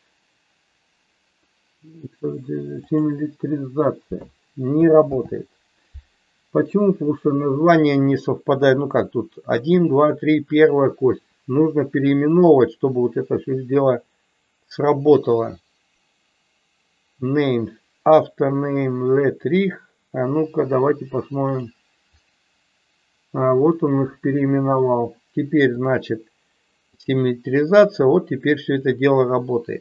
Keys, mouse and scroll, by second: 5.0 ctrl+z, 12.3-19.6 drag, 21.5 click, 25.8-27.1 drag.